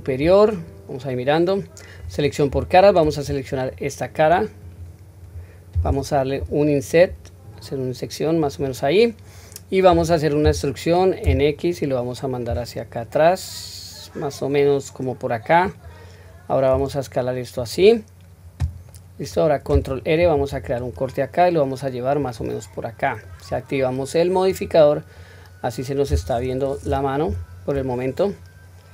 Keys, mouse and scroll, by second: 0.4-2.0 middle drag, 2.5 3, 3.5 click, 4.6 click, 6.4 i, 8.9-9.9 middle drag, 10.4 e, 18.9 middle click, 20.2 ctrl+r, 23.0 middle click, 24.5 click, 25.2 middle click, 27.2 q.